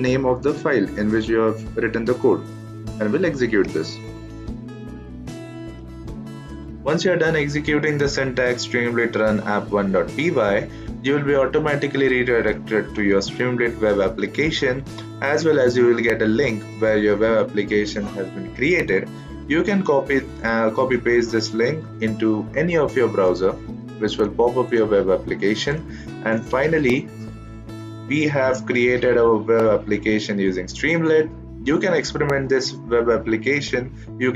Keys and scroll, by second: 3.5 Return.